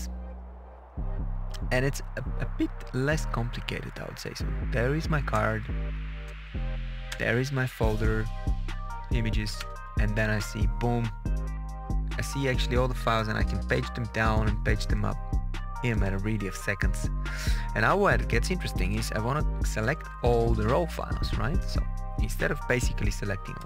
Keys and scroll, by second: 1.7 Up, 3.0 Up, 5.2 Return, 6.2 Return, 7.0 Return, 9.1 Down, 9.5 Return, 12.5 Page_Down, 14.2 Page_Up, 16.3 Page_Down, 18.3 Page_Up, 19.0 Page_Up, 23.5 ctrl+a.